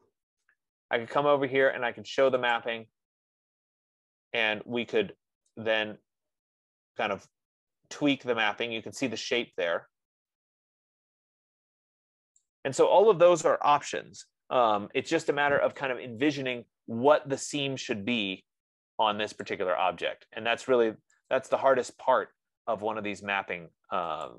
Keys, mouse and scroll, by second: 3.1 click, 12.6 click, 14.8 ctrl+z, 16.2 click, 19.8 click, 21.8 click.